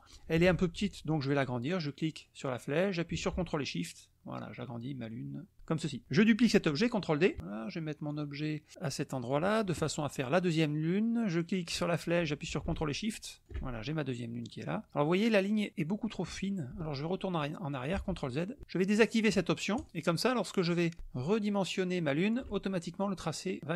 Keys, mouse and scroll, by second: 2.0-5.6 drag, 8.2-9.5 drag, 11.6 click, 14.4 click, 18.0 ctrl+z, 19.8 click, 20.5 click, 21.0-22.5 ctrl+shift+drag, 23.6 click.